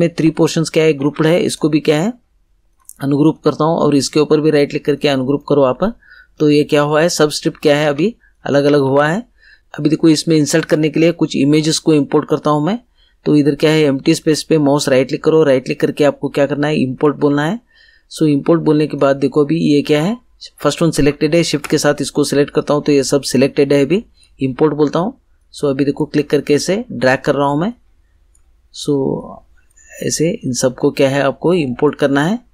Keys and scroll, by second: 1.0 ctrl+z, 7.8 ctrl+z.